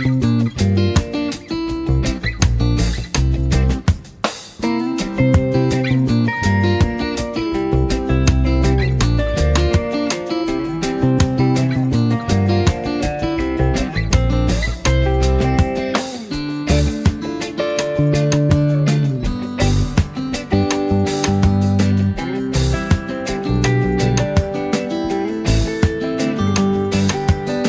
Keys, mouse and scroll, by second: 4.2 space, 4.3-5.2 drag, 7.5 click, 9.3-15.1 drag, 17.0 z, 17.2 click, 17.4 space, 17.6 click, 18.0 v, 18.4-20.7 drag, 21.7 Down, 27.0 click, 27.3 space, 27.5-27.6 drag.